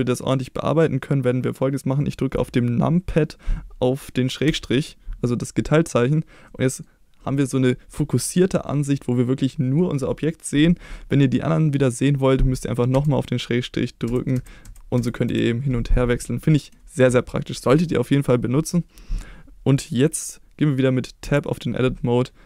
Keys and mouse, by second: 4.4 KP_Divide, 6.4-6.8 middle drag, 8.6 middle drag, 12.9 KP_Divide, 14.0 KP_Divide, 14.3 KP_Divide, 14.6 KP_Divide, 14.9 KP_Divide, 15.2 KP_Divide, 21.2 Tab.